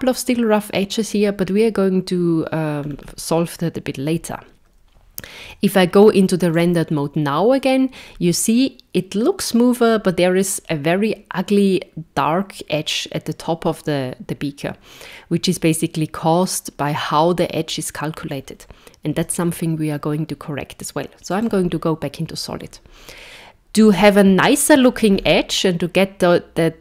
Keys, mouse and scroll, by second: 2.8-5.5 scroll down 3, 5.5 z, 19.2 z, 23.9-24.3 scroll up 2, 24.5 shift+middle click, 25.1 scroll up 4.